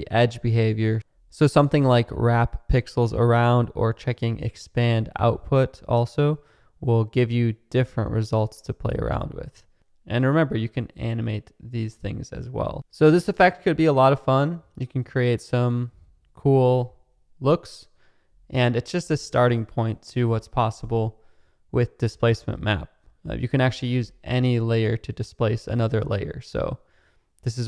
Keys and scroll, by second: 9.7 space, 22.2 space.